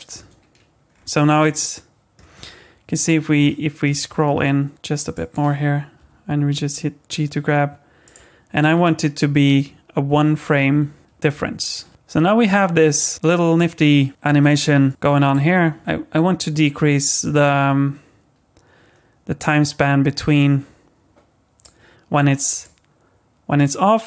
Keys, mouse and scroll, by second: 0.1 space, 0.9-1.6 scroll up 7, 1.6 middle click, 2.4-3.4 scroll up 7, 3.4 middle click, 4.1-4.6 scroll up 3, 5.1 click, 6.0 g, 8.6 click, 11.9 middle click, 11.9 click, 14.9 click, 15.8 click, 22.5 click, 23.6 click.